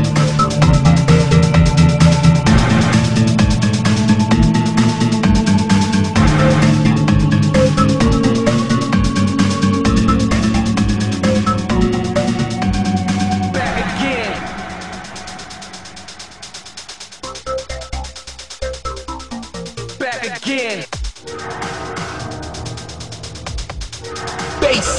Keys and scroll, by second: 18.0 ctrl+z, 21.0 ctrl+z, 22.6 ctrl+z.